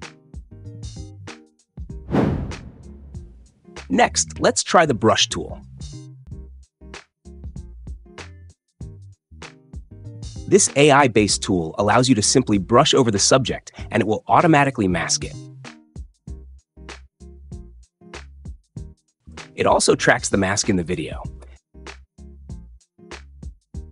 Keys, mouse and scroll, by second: 6.2 click, 12.4-13.4 drag, 14.7 click, 18.3 click.